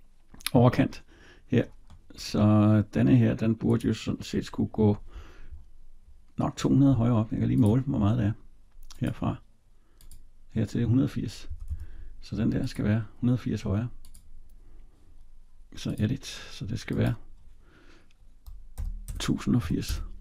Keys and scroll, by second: 11.3 Escape.